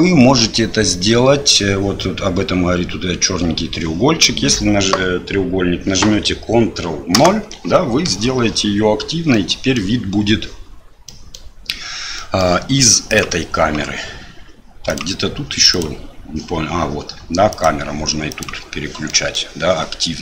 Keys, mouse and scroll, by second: 9.4-9.8 middle drag, 11.1-11.4 middle drag, 12.2 middle click, 13.1 click, 14.9 click, 15.7 click, 17.5 click, 19.1 middle click.